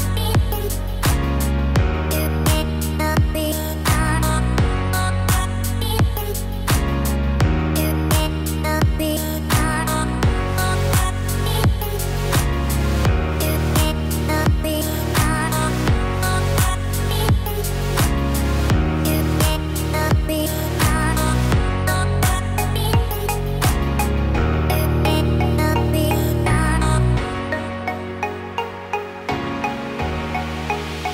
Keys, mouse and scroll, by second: 3.6-4.0 scroll down 2, 4.0 middle click, 4.9-6.8 scroll up 2, 7.6 click, 8.0 click, 9.4 s, 16.6 KP_3, 18.4 r, 23.2 middle click, 24.5 click, 25.7 click, 29.9 click.